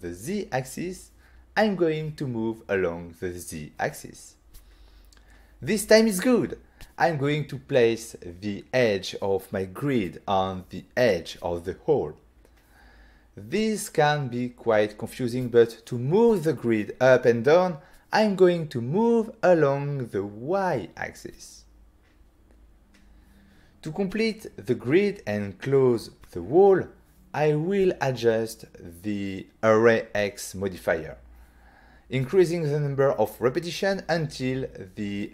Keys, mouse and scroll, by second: 2.1 g, 3.3 z, 12.1 click, 12.7 middle click, 14.6 middle click, 14.9 ctrl+middle click, 16.0 g, 16.3 z, 18.2 click, 18.5 ctrl+middle click, 20.5 g, 20.7 y, 25.3 click, 25.5 click, 25.7 middle click, 26.4 middle click, 28.3 scroll up 1, 29.3 click, 30.0 click, 30.0 scroll down 1, 30.6 scroll up 1, 31.9 click, 32.7 click, 33.4 click, 34.1 click, 35.0 click.